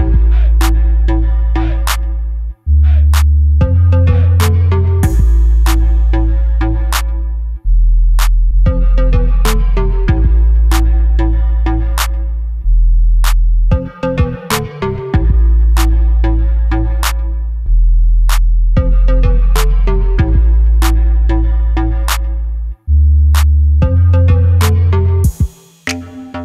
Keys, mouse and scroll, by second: 0.9 scroll up 1, 1.2 scroll down 1, 1.4 KP_7, 3.4 ctrl+r, 6.9 scroll down 1, 7.1 middle click, 7.8-8.1 scroll down 1, 8.1 middle click, 8.8-9.2 scroll up 1, 9.6 shift+middle click, 10.4 shift+right click, 13.1 Tab, 13.4 click, 13.6-16.8 middle drag, 14.8 shift+a, 15.2 s, 16.8 click, 17.1 scroll up 1, 17.5 KP_Decimal, 17.9 scroll down 1, 18.6 s, 20.7 click, 20.8-22.9 middle drag, 21.7 g, 23.8 click, 24.0 s, 25.2 click, 25.9 g.